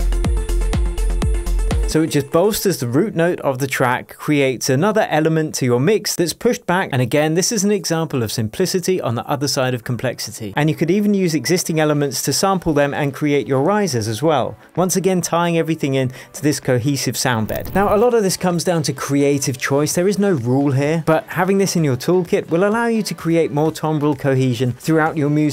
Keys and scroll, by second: 1.8 space.